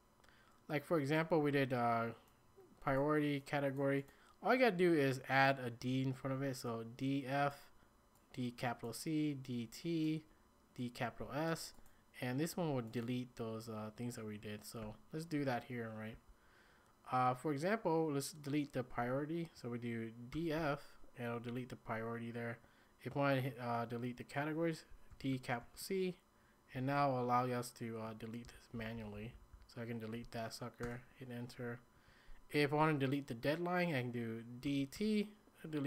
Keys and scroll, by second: 14.8 typing, 16.1 typing, 20.3 typing, 24.9-26.1 typing, 28.5 ctrl+h, 28.8 ctrl+h, 28.9 ctrl+h, 29.1 ctrl+h, 29.3 ctrl+h, 29.5 ctrl+h, 30.8 Return, 34.6-34.9 typing.